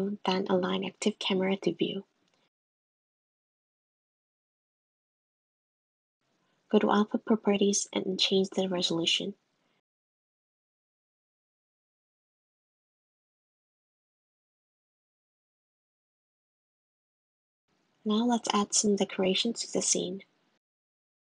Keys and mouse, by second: 6.2 click, 7.1-8.7 drag, 13.7 click, 14.9 click, 15.5 g, 19.9 click, 20.6 click.